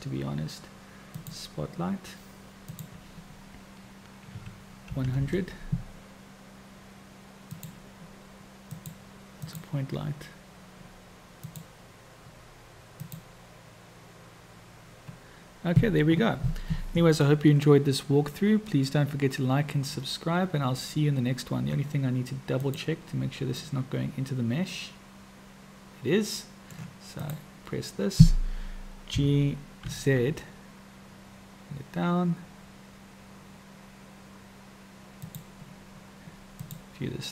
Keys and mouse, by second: 1.2 click, 2.8-9.1 drag, 5.0 o, 9.5 click, 11.6 click, 22.6-23.0 drag, 23.8-25.2 middle drag, 25.2-26.0 drag, 26.0 middle click, 26.2-27.1 drag, 29.4 g.